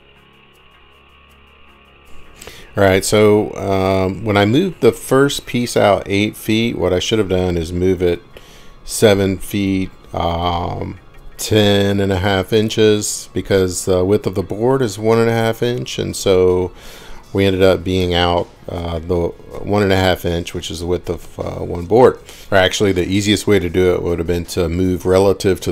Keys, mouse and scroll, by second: 0.2 click, 1.4 middle click, 2.0-2.3 scroll down 3, 5.8 scroll up 1, 6.6 scroll, 7.1 middle click, 8.5 scroll, 13.6 middle click, 18.6-19.2 scroll up 18, 19.2-20.2 Up, 22.4 Escape, 23.3 Left, 23.8-24.8 Left, 25.1-25.7 Right.